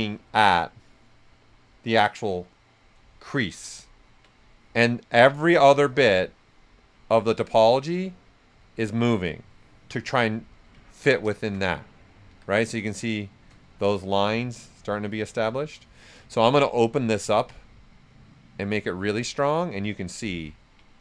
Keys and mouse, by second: 3.1 click, 3.2 shift+f, 3.4 right click, 6.2-8.6 drag, 8.6-10.8 drag, 10.8 ctrl+right click, 11.3 shift+f, 11.5 shift+right click, 12.2 s, 12.3-16.0 drag, 17.5 click, 20.5 ctrl+right click.